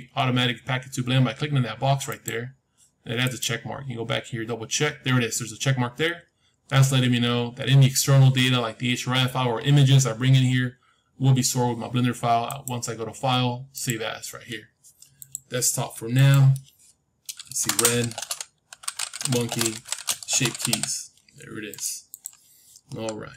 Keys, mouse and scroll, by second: 3.1-5.2 drag, 12.4-14.4 drag.